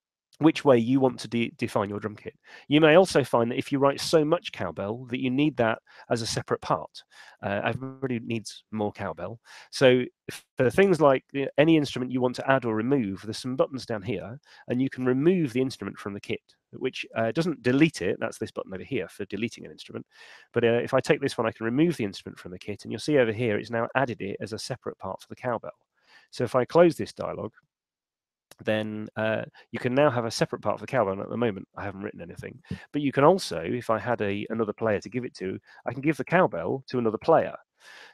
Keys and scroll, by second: 33.6 shift+p, 34.5 Escape.